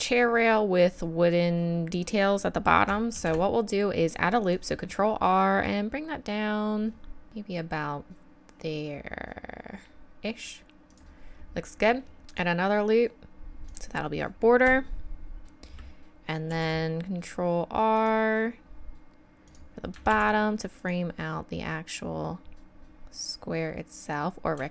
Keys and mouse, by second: 3.1 ctrl+r, 11.5 middle click, 12.2 ctrl+r, 16.5 ctrl+r, 20.1 ctrl+r.